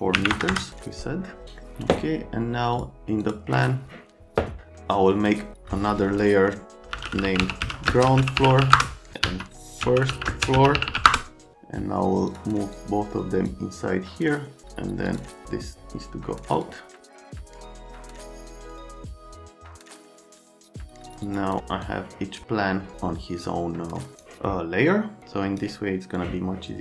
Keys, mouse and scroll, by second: 0.2 KP_4, 0.3 KP_0, 0.5 KP_0, 1.4 right click, 2.7 click, 3.2 click, 6.6-11.4 typing, 12.3 middle click, 12.7 click, 15.0 click, 16.5 click, 17.1 click, 17.7 click, 17.9 Escape, 18.0 click, 19.1 click, 20.1 click, 20.8 click, 21.2 click, 21.8 click, 24.1 click, 25.2 click, 26.1 click.